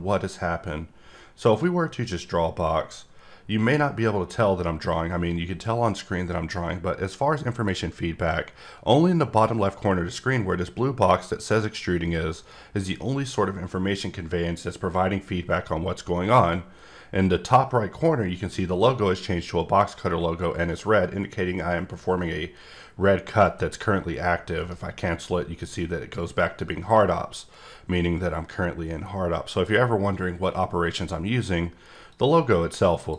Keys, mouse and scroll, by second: 1.6 click, 24.6 right click, 32.1 click.